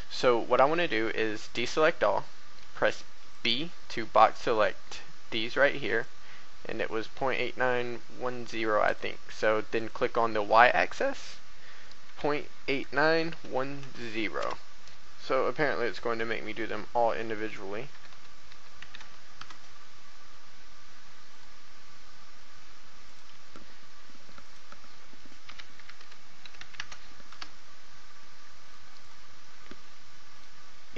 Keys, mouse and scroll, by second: 0.6 a, 3.0 b, 3.3-10.8 drag, 12.0-13.8 typing, 14.8 click, 17.0-19.0 typing, 21.3 right click, 23.0 click, 25.4-26.8 typing, 29.0 right click, 30.3 click.